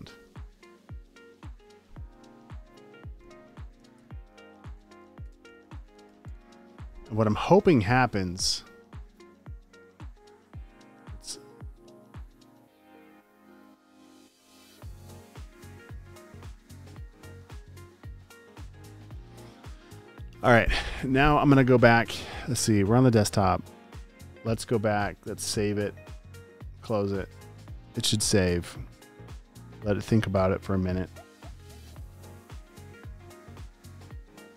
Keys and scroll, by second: 3.6-6.6 typing, 4.6 super+a, 17.3 shift+super+r, 18.8 Return.